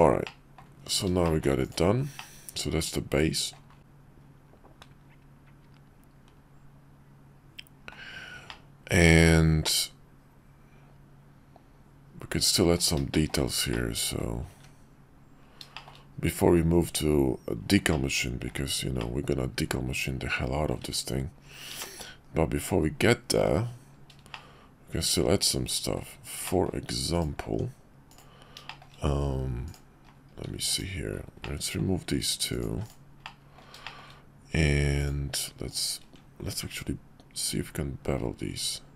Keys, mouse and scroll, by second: 0.2-0.6 middle drag, 1.2 shift+middle click, 1.6 click, 2.2-3.5 middle drag, 3.8-7.9 middle drag, 8.5-12.7 middle drag, 13.1 shift+middle drag, 13.7-14.2 middle drag, 15.7 shift+middle click, 16.3 KP_5, 17.9-18.5 middle drag, 19.0-20.7 middle drag, 21.8 shift+middle drag, 22.2 KP_5, 24.3-25.9 middle drag, 26.1-26.7 middle drag, 27.4 Tab, 28.1 click, 28.4 middle click, 28.6 shift+click, 28.9 middle click, 29.6 click, 30.6 x, 31.4 middle click, 32.5 click, 32.7 x, 33.2 middle click, 33.8 shift+middle click, 35.0 click, 35.7 shift+click, 36.6 ctrl+b.